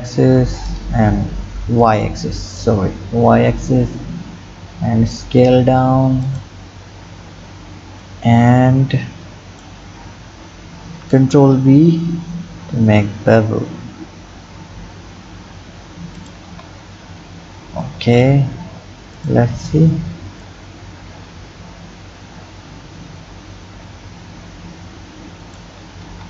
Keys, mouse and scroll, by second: 1.8-3.4 drag, 3.4 s, 6.7-8.0 scroll down 6, 8.0 scroll down 1, 8.0-10.1 drag, 10.1-11.1 scroll down 1, 11.1 ctrl+b, 16.5 Tab, 17.0-17.9 scroll down 3, 17.9 click, 19.2 click, 19.6 click, 20.4 click, 25.5 Tab, 26.1 Tab.